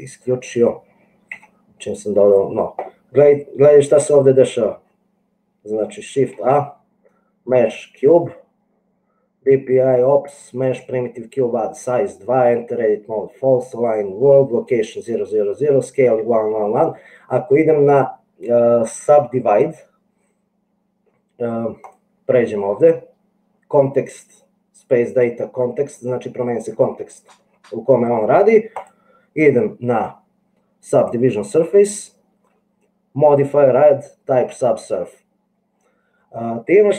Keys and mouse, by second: 1.5 n, 6.4 shift+a, 29.0-31.5 middle drag.